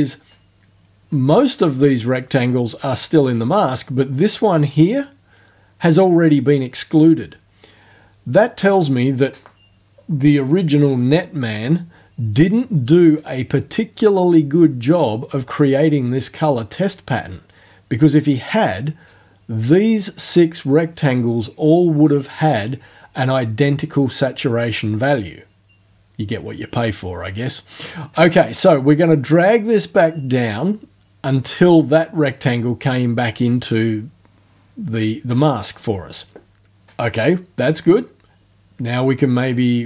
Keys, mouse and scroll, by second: 28.4-31.6 drag, 39.4-39.8 drag.